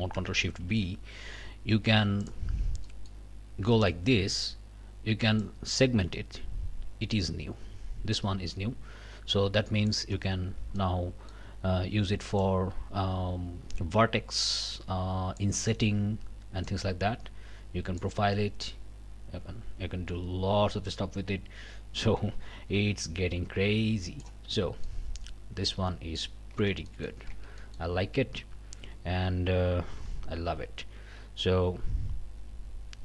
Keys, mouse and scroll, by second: 0.7 ctrl+shift+b, 2.2 click, 2.6 scroll down 2, 2.9 middle click, 3.7 middle click, 5.4-10.1 drag, 10.4 scroll up 2, 10.8 middle click, 12.4-15.6 drag, 16.7-18.2 drag, 18.6-24.4 drag, 24.6 scroll down 1, 24.8-26.4 drag, 26.5 Tab, 26.9 middle click, 27.3 Tab, 27.6 middle click, 28.8 a, 30.0 q.